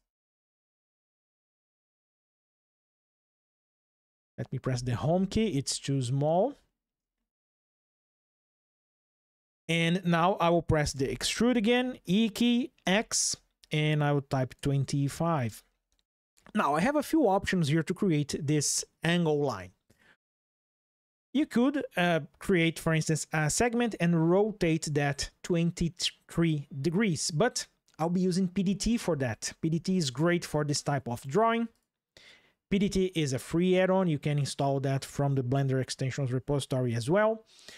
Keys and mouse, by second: 4.4 Home, 6.9 shift+click, 7.1 shift+middle click, 10.7 e, 12.6 x, 14.3 KP_2, 14.5 KP_5, 15.2 KP_Enter, 30.2 click, 31.5 click, 33.4 click, 37.6 ctrl+shift+\.